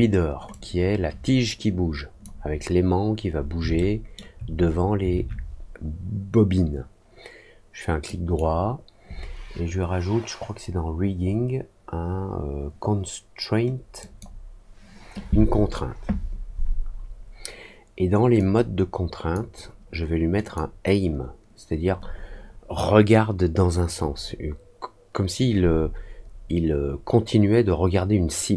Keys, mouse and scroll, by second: 0.4-2.1 drag, 3.7 alt+middle click, 8.0 right click, 13.9 click, 18.3 click, 20.4 click.